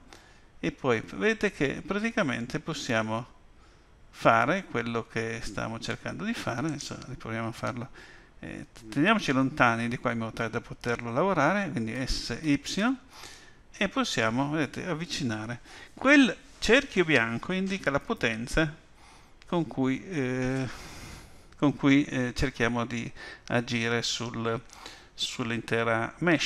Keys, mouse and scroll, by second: 11.9 s.